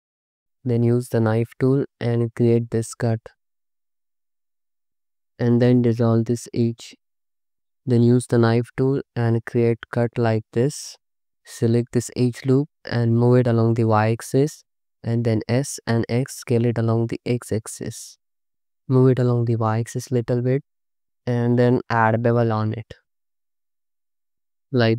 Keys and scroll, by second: 0.1 1, 1.9-5.5 typing, 6.3 ctrl+x, 8.5-11.3 typing, 14.8 s, 15.6 x, 21.6 ctrl+b.